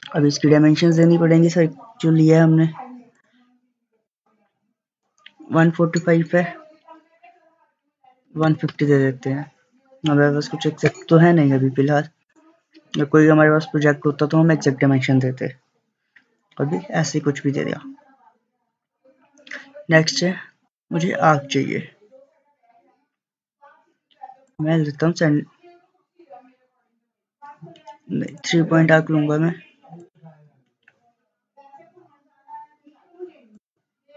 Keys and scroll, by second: 7.9-8.9 typing.